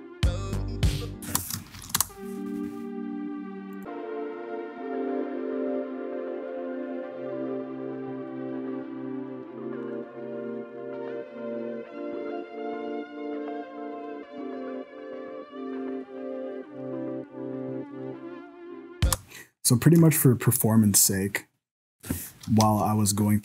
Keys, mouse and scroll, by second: 1.3 space, 1.7 shift+Left, 2.0 space, 3.7 click, 19.1 space, 19.4-20.0 scroll up 2, 19.6 middle click, 20.1 shift+middle click, 22.6 shift+Left.